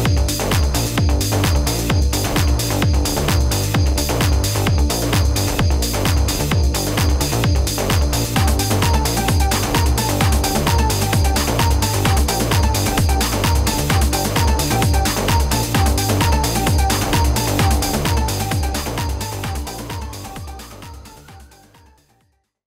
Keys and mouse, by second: 2.6 d, 3.5 click, 4.2 click, 4.8 click, 7.2 click, 7.8 click, 14.1 click, 15.7 v, 16.3 click.